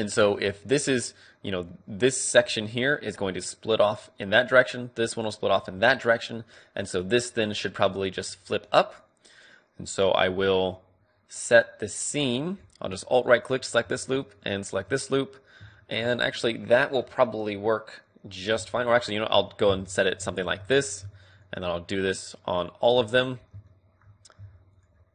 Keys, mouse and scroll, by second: 1.5-5.0 d, 2.9-6.6 drag, 5.6 d, 6.5 d, 7.8-9.0 d, 8.2-10.0 drag, 9.0-10.8 right drag, 13.3-16.1 right drag, 15.1-17.4 middle drag, 18.7-20.3 right drag, 20.3-24.0 middle drag, 24.0 click, 24.6 middle click, 24.7-25.1 right drag.